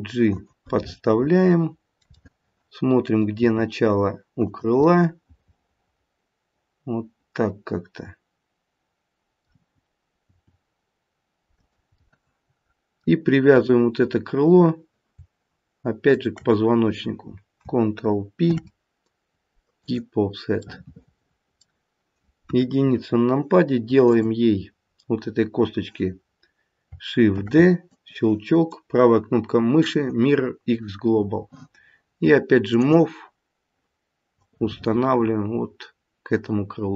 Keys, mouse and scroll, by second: 0.7 middle click, 2.1 middle click, 3.4 g, 4.8 middle click, 5.9 middle click, 10.2 g, 11.9 middle click, 12.1 middle click, 13.5 click, 16.0 shift+click, 18.4 ctrl+p, 20.8 middle click, 22.5 KP_1, 24.0 click, 27.3 shift+d, 28.5 right click, 32.7 click, 34.4 click.